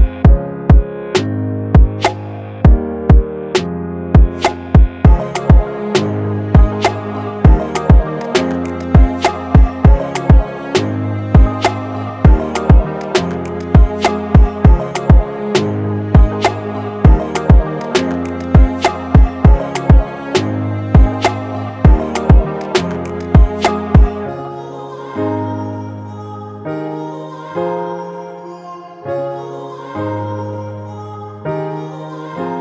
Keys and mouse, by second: 6.6-11.9 middle drag, 12.6-14.1 middle drag, 14.1-16.2 drag, 16.2 middle click, 17.9-19.4 middle drag, 19.4-20.0 drag, 21.1-24.0 drag, 22.9 middle click, 26.4 F12.